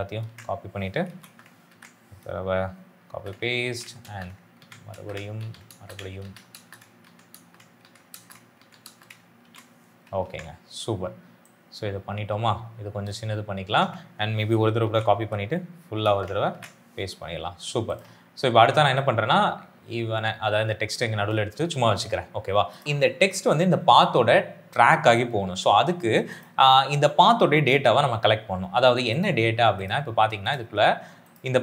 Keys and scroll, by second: 0.1 ctrl+c, 0.9 Right, 1.1 space, 1.6 ctrl+v, 3.0-8.7 typing, 3.5 ctrl+v, 4.5 ctrl+v, 5.3 ctrl+v, 6.1 ctrl+v, 6.9 ctrl+v, 7.7 ctrl+v, 8.5 ctrl+v, 9.3 ctrl+v, 10.1 ctrl+a, 14.7 ctrl+c, 15.1 Right, 15.9 space, 16.4 ctrl+v.